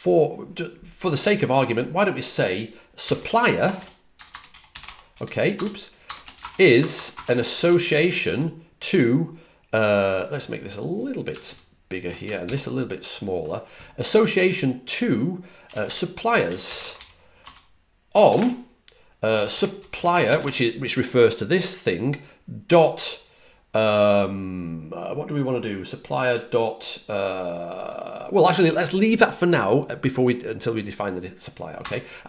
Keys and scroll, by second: 2.7-8.3 typing, 11.3 alt+super+Right, 15.8-20.8 typing, 22.5 typing, 31.4-32.2 typing.